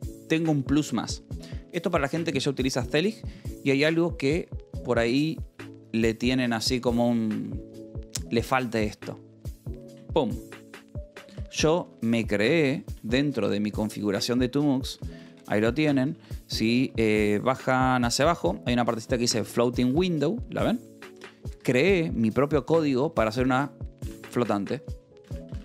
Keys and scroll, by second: 10.3 alt+g, 11.8 alt+g, 12.1-16.4 typing, 17.7 ctrl+j, 18.3 ctrl+d, 18.8 j, 19.3 j, 21.4 Escape, 21.6 k, 22.8 j, 24.5 alt+g.